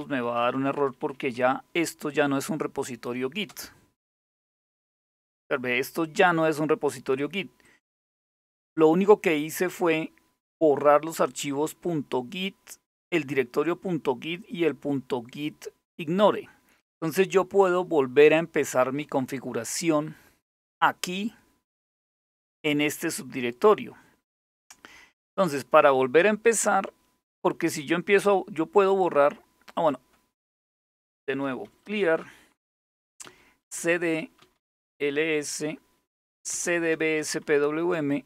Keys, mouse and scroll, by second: 0.0-1.5 typing, 3.1 Return, 7.3 click, 19.9-21.7 scroll up 1, 21.7-23.7 scroll down 1, 23.7-24.7 scroll up 1, 24.7-26.0 scroll down 2, 26.0-29.4 scroll up 2, 29.4 click, 30.3-37.0 typing, 37.1 Return.